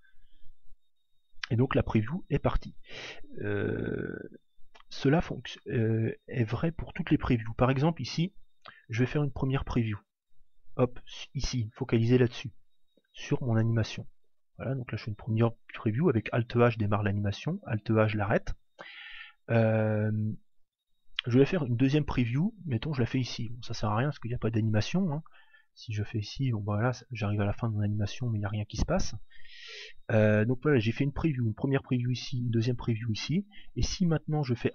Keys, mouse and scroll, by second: 9.2 p, 14.1 alt+a, 17.3 alt+a, 17.9 click, 22.1 p, 25.7 alt+a, 28.5 alt+a, 29.0 click.